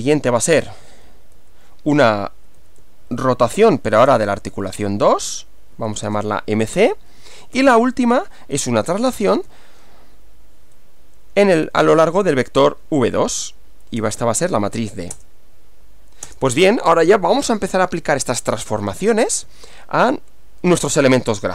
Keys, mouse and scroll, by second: 0.9 Left, 1.4 Down, 2.6 Up, 2.8 Left, 3.7 Right, 4.0 BackSpace, 4.1 2, 4.3 Left, 5.7 Right, 6.1 BackSpace, 6.2 c, 7.2 Up, 8.7 Left, 9.2 BackSpace, 9.3 2, 9.5 Left, 14.0 BackSpace, 14.2 d, 15.1 Return, 16.3 Return.